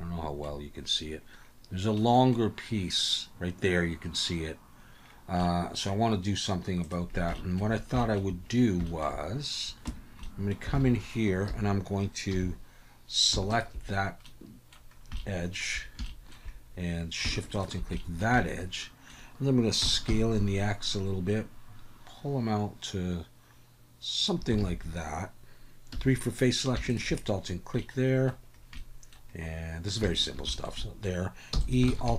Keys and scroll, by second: 9.8 Tab, 10.7 alt+a, 12.3 2, 19.8 s, 20.0 x, 24.6 alt+a, 25.9 3, 31.5 e, 31.9 alt+s.